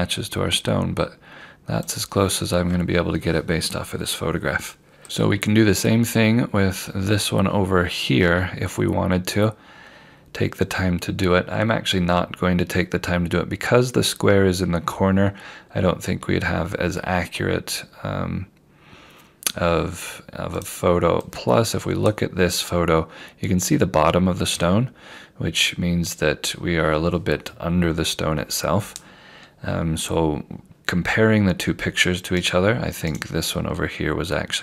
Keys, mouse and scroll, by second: 1.9 scroll up 1, 1.9 click, 5.8 scroll down 1, 18.8 scroll up 1, 20.6 click, 32.5 right click.